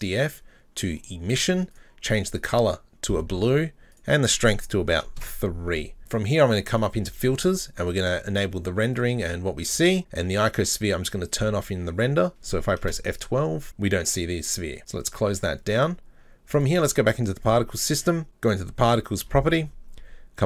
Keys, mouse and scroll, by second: 1.7 click, 4.0-6.6 drag, 6.7-11.4 drag, 16.6 right click, 18.4 click, 19.6-20.4 scroll down 14.